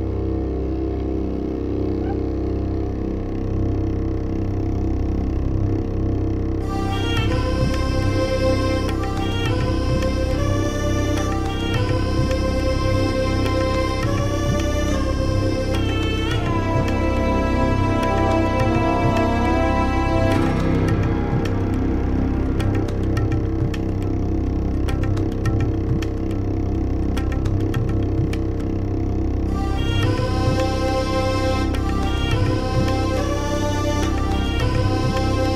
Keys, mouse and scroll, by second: 0.2 click, 1.0 middle click, 1.4 scroll down 1, 1.6 scroll up 1, 2.2 click, 2.8 ctrl+scroll up 2, 3.5 ctrl+scroll up 2, 3.9-4.2 ctrl+scroll down 4, 5.1 ctrl+scroll down 2, 6.3 click, 7.3 click, 8.4 click, 9.3 click, 9.5 click, 10.4 click, 11.4 click, 11.8 click, 12.0 middle click, 12.6 click, 13.4 click, 14.5 click, 15.2 click, 15.8 scroll down 4, 16.6 click, 17.1 middle click, 17.4 ctrl+scroll down 2, 17.7 ctrl+middle click, 18.5 middle click, 19.0 click, 19.9 click, 20.7 click, 21.1 middle click, 21.8 click, 22.4 click, 23.0 scroll down 2, 23.5 click, 24.5 click, 25.7 scroll down 1, 26.0 scroll up 1, 26.6 click, 27.4 click, 28.6 click, 30.4 click, 30.8 click, 31.1 ctrl+scroll down 2, 31.5-33.0 scroll up 8, 33.6 click, 34.0 ctrl+scroll down 2, 35.1 click, 35.4 ctrl+scroll up 2.